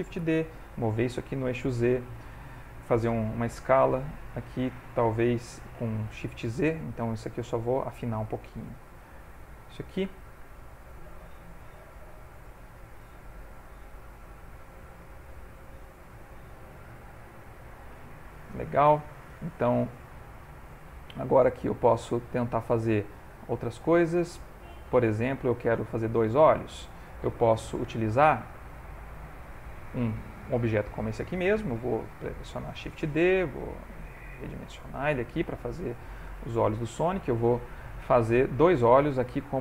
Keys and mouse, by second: 0.2 shift+d, 3.6 s, 9.6 shift+middle click, 9.7 ctrl+middle click, 10.5 shift+middle click, 11.8 s, 13.4 s, 16.1 s, 18.1 ctrl+middle click, 18.6 shift+middle click, 19.6 ctrl+middle click, 20.2 ctrl+middle click, 20.7 shift+middle click, 21.4 middle click, 23.3 shift+middle click, 23.9 ctrl+middle click, 24.4 shift+middle click, 25.2 ctrl+middle click, 26.3 middle click, 29.1 click, 30.7 click, 31.9 shift+d, 33.2 s, 35.4 g, 37.3 ctrl+middle click, 37.8 shift+middle click, 38.4 ctrl+middle click.